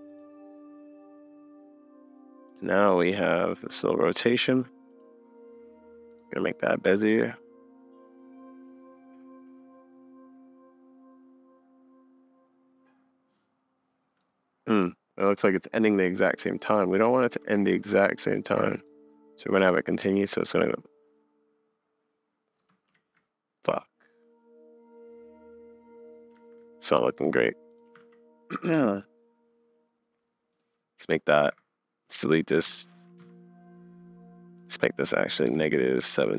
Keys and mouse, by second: 2.5 click, 3.0 click, 7.1 click, 8.6 middle click, 12.4-14.2 middle drag, 16.5 click, 16.9 drag, 17.3 g, 19.5 click, 20.2 space, 22.6 space, 22.9 super+z, 26.4 super+z, 27.1 click, 27.7 click, 28.0 super+s, 30.6-33.2 drag, 33.2 Up, 34.6 click.